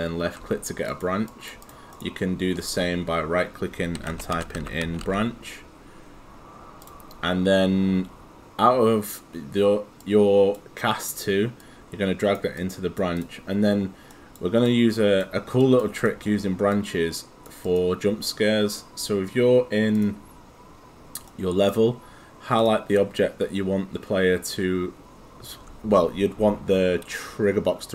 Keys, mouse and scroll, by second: 0.9 click, 1.9 right click, 3.7-5.6 typing, 8.0 click, 14.1 right click, 14.7 click, 20.1 click, 21.3 right click, 22.6 click.